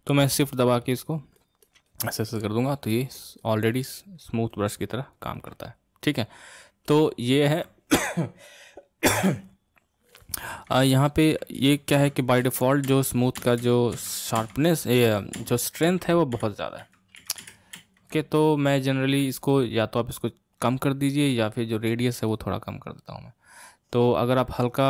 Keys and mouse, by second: 0.5-6.9 shift+drag, 6.9-9.9 middle drag, 10.6 ctrl+z, 11.7 ctrl+z, 12.1 ctrl+z, 12.5 ctrl+z, 12.9 ctrl+z, 13.5 ctrl+z, 13.7 ctrl+z, 14.1 ctrl+z, 14.5 ctrl+z, 15.5 ctrl+z, 15.9 ctrl+z, 16.4 ctrl+z, 16.9 ctrl+z, 17.3 ctrl+z, 17.5 ctrl+z, 17.9 ctrl+z, 18.5-21.5 middle drag.